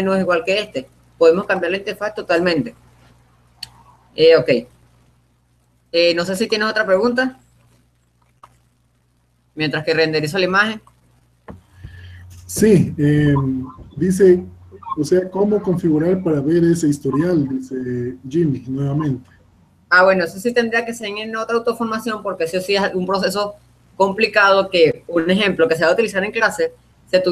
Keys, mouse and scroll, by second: 5.2-8.5 middle drag, 17.1-18.6 drag, 20.2-24.4 middle drag.